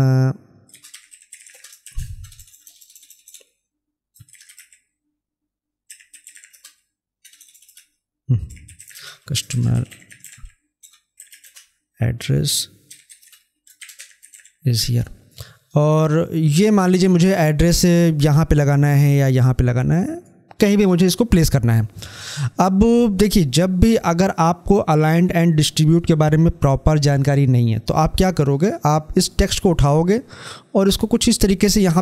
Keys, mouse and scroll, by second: 9.3 shift+a, 12.7 i, 13.1 space, 15.6-22.4 drag, 29.2-32.0 drag.